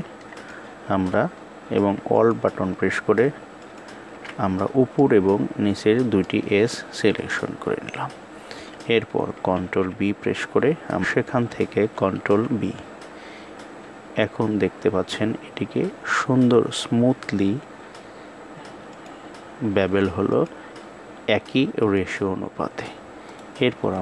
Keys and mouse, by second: 3.3 alt+shift+click, 4.6-5.9 middle drag, 6.9 KP_1, 9.3 ctrl+b, 12.0 ctrl+b, 20.1-21.8 drag, 23.1 right click.